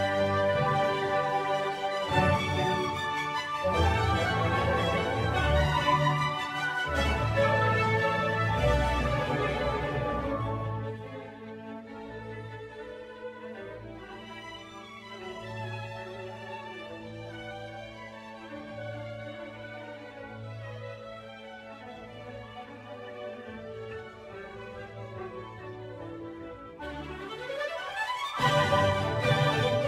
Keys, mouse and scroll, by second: 0.7-3.7 middle drag, 3.7 click, 4.1-6.6 middle drag, 6.6 g, 9.2-10.7 middle drag, 10.7 click, 12.4-16.1 shift+middle drag, 16.1 click, 17.3-19.3 drag, 22.2 click, 23.2 click, 29.0-29.8 shift+middle drag.